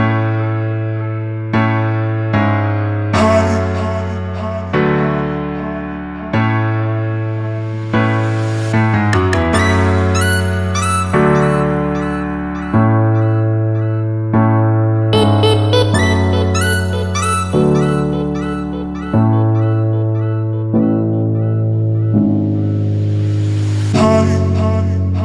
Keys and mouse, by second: 5.9 click, 14.3 ctrl+z, 15.9 ctrl+z, 16.0 ctrl+z, 17.7-18.8 drag, 20.4 click, 21.1 middle click, 22.0 click.